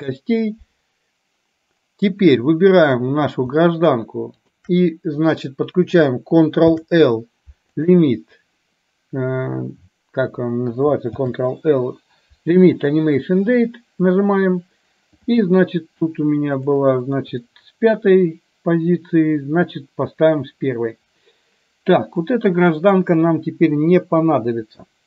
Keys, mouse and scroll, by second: 3.0 click, 4.5 shift+click, 6.8 ctrl+l, 11.3 ctrl+l, 16.6 click, 16.9 click, 22.4-23.0 drag, 24.1 Delete.